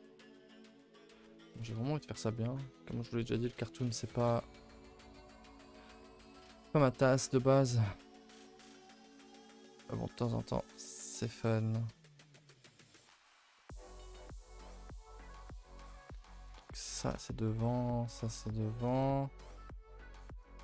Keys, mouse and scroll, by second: 0.5 ctrl+i, 0.6 h, 2.9 KP_1, 4.2 KP_0, 5.3 click, 7.5 click, 8.2 click, 8.6-11.6 drag, 14.8 click, 15.9 click, 16.4 click, 18.1 click, 20.4 click.